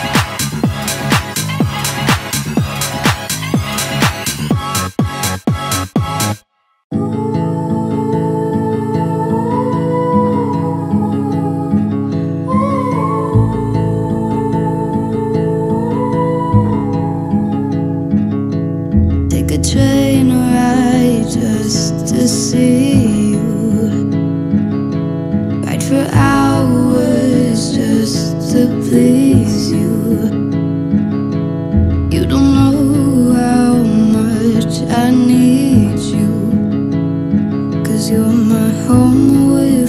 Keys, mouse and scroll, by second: 10.2-14.7 alt+drag, 16.7-19.2 drag, 21.6-22.2 middle drag, 25.1-30.5 drag, 30.5 Down, 32.6 click, 36.9-37.6 scroll down 1, 37.6-39.1 drag.